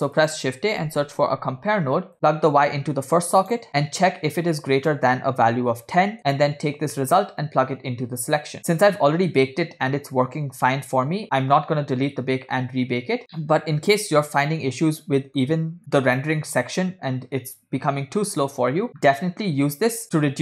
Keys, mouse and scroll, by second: 2.7 click, 3.7 middle click, 5.0-6.2 drag, 7.2 middle click, 8.5 click, 11.2 scroll down 2, 15.4 middle click, 15.8 click, 19.6 scroll up 1.